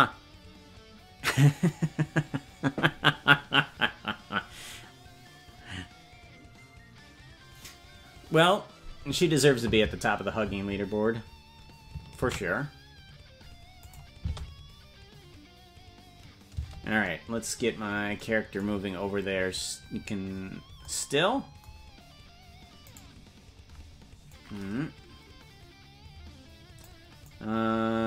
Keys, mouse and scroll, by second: 13.9 click, 14.2 space, 16.6 space, 18.7-19.5 scroll down 8, 19.5 scroll up 1, 20.3 scroll up 3, 20.4 scroll down 1, 23.0 right click, 24.3-26.9 drag, 27.2-28.0 drag.